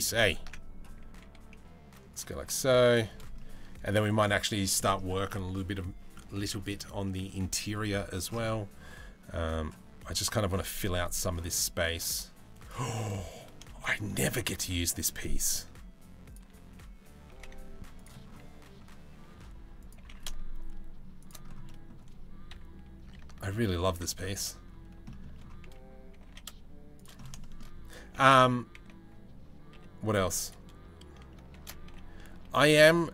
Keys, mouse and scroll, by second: 0.2 ctrl+z, 0.7 s, 2.0 g, 3.0-4.4 middle drag, 4.9-5.4 middle drag, 5.8 middle drag, 12.6-13.8 middle drag, 13.9-16.9 shift+middle drag, 16.9 g, 18.7 s, 19.6 g, 21.3 middle click, 22.1 KP_3, 22.8 ctrl+KP_1, 23.2 ctrl+KP_3, 24.7 shift+middle click, 25.7 g, 27.1 middle click, 27.7 g, 31.2 shift+d.